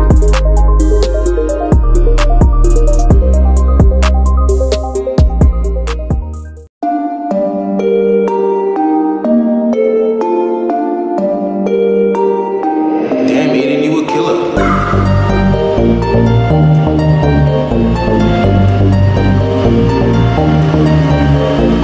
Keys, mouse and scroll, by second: 0.5-3.5 drag, 4.3 scroll up 1, 5.2 click, 5.5 scroll down 1, 5.7 click, 6.5-11.7 drag, 11.7 ctrl+t, 11.9-16.2 drag, 18.2 ctrl+z, 19.0-21.8 drag.